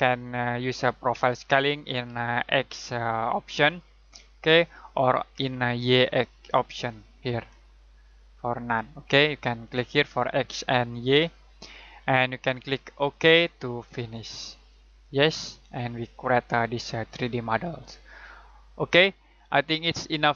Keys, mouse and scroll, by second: 3.6 click, 6.7 click, 10.9 click, 16.2 middle click, 17.8-18.1 scroll up 1, 18.1-18.6 scroll down 1, 18.6-19.1 scroll up 1, 19.1 middle click.